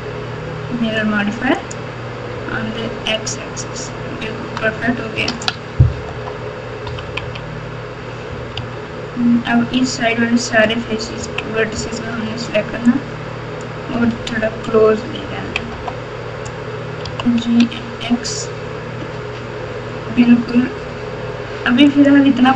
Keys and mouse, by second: 4.3 Tab, 5.2 alt+z, 6.1 KP_8, 6.8 KP_6, 7.0 KP_6, 7.2 KP_6, 8.5 Tab, 11.2 KP_1, 12.2 alt+z, 13.0-13.6 drag, 14.1 alt+z, 15.2 KP_6, 15.4 KP_6, 15.7 KP_8, 17.0 g.